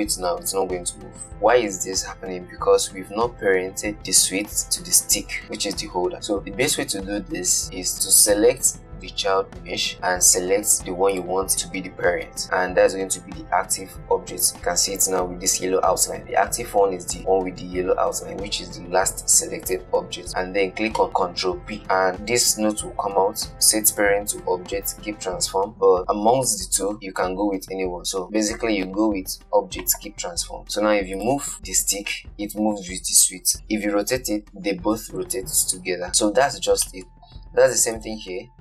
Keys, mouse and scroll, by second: 8.8 click, 11.4 shift+click, 21.8 ctrl+p, 30.7 click, 31.5 click, 31.9 g, 34.0 r, 37.0 scroll down 4, 37.2-38.2 shift+middle drag, 38.2 shift+click.